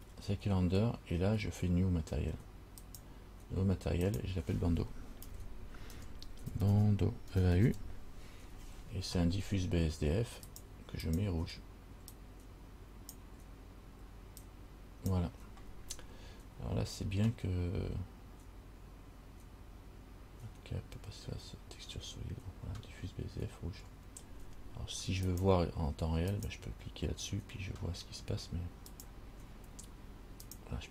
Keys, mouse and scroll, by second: 3.0 click, 4.2 click, 11.2 click, 25.5 click, 29.1 click.